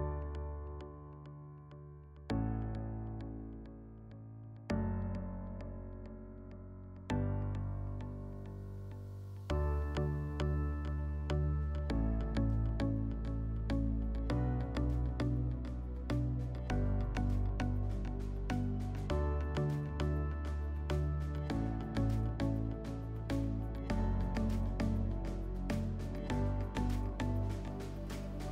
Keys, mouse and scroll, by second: 0.9 click, 2.6 click, 4.5 click, 5.4 middle click, 8.9 click, 10.0 4, 11.1 middle click, 11.6 scroll, 12.0 click, 12.8 s, 14.4 click, 15.8 s, 17.4 click, 18.1 4, 18.9 click, 19.4 click, 20.7 click, 21.5 click, 22.0 right click, 25.0 click, 26.1-26.9 typing, 27.6 click.